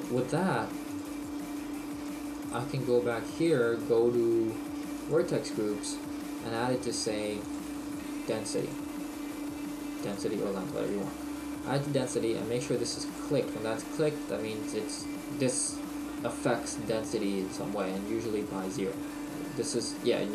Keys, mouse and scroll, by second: 5.1 click, 5.6-6.6 scroll down 1, 7.5 click, 13.2 click.